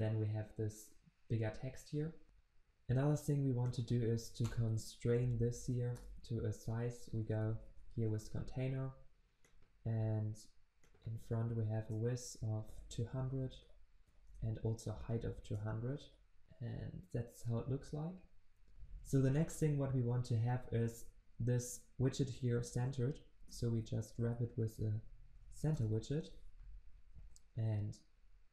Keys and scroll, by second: 4.5 alt+Return, 11.8 Return, 16.4 ctrl+s, 18.7 ctrl+z, 23.5 alt+Return, 27.0 alt+Return, 27.4 ctrl+s.